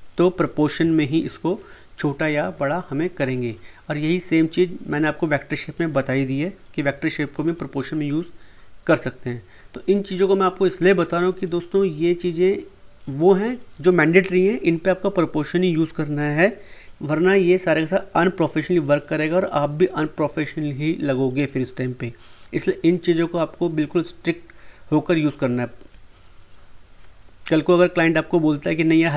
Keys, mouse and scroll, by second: 1.6-4.5 drag, 10.9 click, 28.6-29.1 drag.